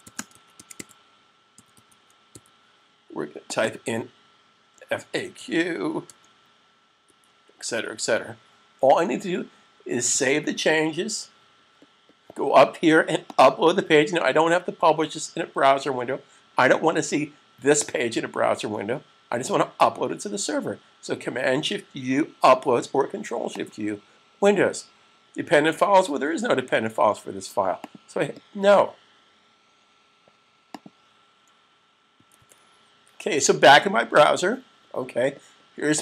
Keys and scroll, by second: 0.0-2.5 typing, 5.3-6.9 typing, 10.3 s.